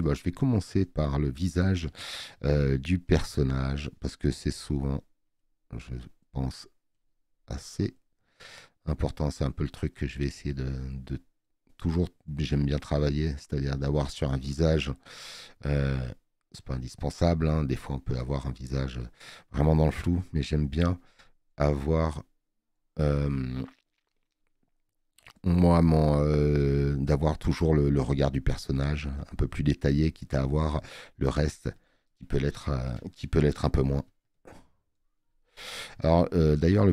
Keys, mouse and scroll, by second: 0.9 alt+scroll up 2, 1.8 space, 2.0 click, 27.3 space, 27.5 click.